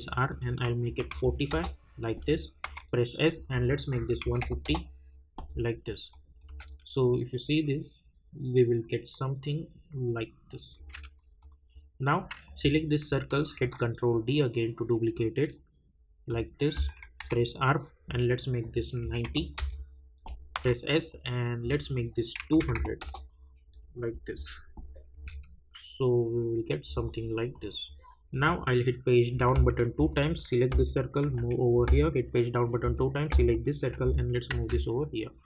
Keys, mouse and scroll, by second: 0.3 click, 1.5 Return, 3.5 click, 6.1 click, 6.4 space, 10.7 space, 11.4 click, 16.3 click, 17.2 r, 18.6 click, 19.5 Return, 21.1 click, 23.0 Return, 25.1 space, 27.5 click, 29.3 Page_Down, 30.1 click, 31.9 Page_Down, 32.8 click, 33.8 [.